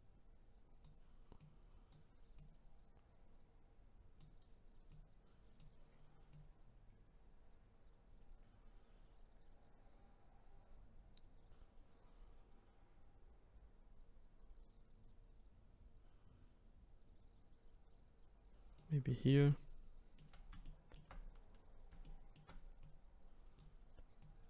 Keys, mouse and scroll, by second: 1.4 click, 2.3 click, 4.9 click, 6.3 click, 19.5-22.8 shift+middle drag, 22.8-24.3 drag.